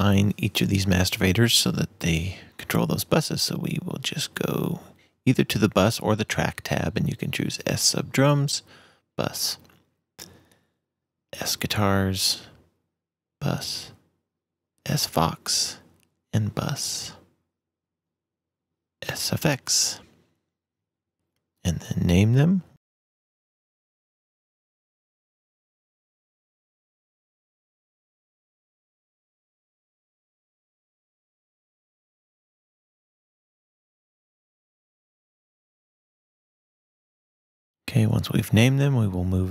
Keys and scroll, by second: 23.1 m, 23.5 s, 24.7-26.3 typing, 26.4 super+s, 26.6 super+Right, 27.3 super+m, 27.5-29.7 typing, 29.8 super+s, 30.1 super+Right, 30.9 super+m, 31.1 s, 32.4-33.6 typing, 33.7 super+x, 34.0 super+Right, 35.0 super+m, 35.3-36.7 typing, 36.8 shift+Return, 37.4 Return.